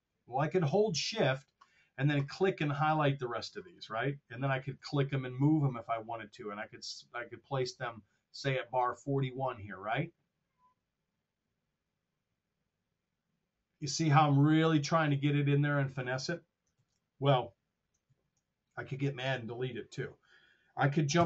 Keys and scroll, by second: 16.7 super+z, 17.9 super+z.